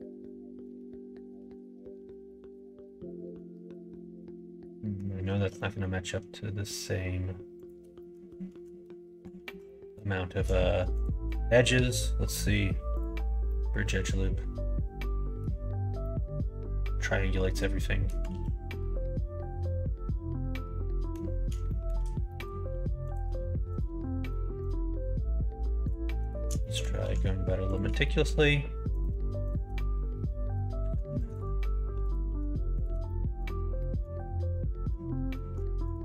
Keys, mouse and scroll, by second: 0.6-3.3 middle drag, 3.9-4.9 middle drag, 5.5 middle click, 7.5 shift+click, 7.9 middle click, 8.5 ctrl+shift+z, 9.4 ctrl+z, 9.6 middle click, 10.9 shift+click, 11.7 ctrl+e, 13.5-14.8 drag, 14.8 middle click, 16.0-18.1 middle drag, 18.3 ctrl+z, 18.6-21.1 middle drag, 21.6 shift+middle click, 22.2 middle click, 23.0 click, 24.2 shift+click, 26.2 shift+click, 26.5 middle click, 26.9 ctrl+e, 28.0 middle click, 28.8 click, 29.7 middle click, 30.7 ctrl+r, 33.0 middle click, 33.7 middle click, 34.8 middle click, 35.8 shift+click.